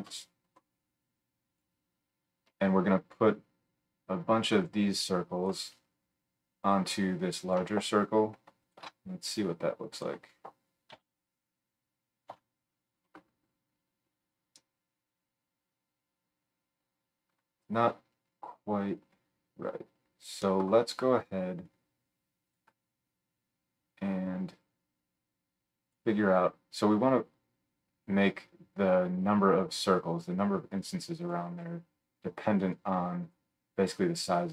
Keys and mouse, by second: 3.7-8.7 middle drag, 9.9 middle click, 10.0-21.6 drag, 10.9 KP_Decimal, 12.2 KP_7.